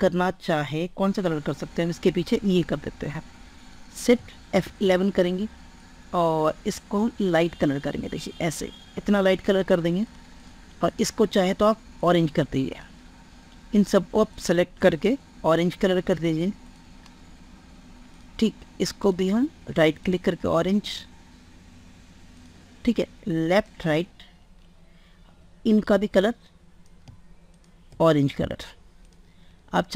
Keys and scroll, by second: 4.0 shift+F11.